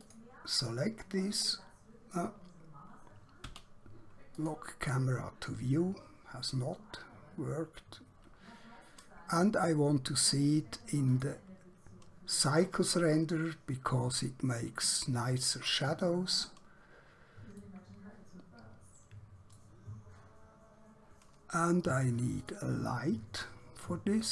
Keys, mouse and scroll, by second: 0.0 click, 0.9-1.3 scroll up 1, 1.5 scroll down 1, 3.4 q, 4.4 click, 6.3-7.2 scroll up 1, 7.8-8.1 scroll down 1, 8.1-8.5 scroll up 1, 8.5-10.3 scroll down 1, 10.3 click, 15.3 click, 17.6 middle click, 20.3 scroll down 1, 20.5 scroll up 1, 22.5 click.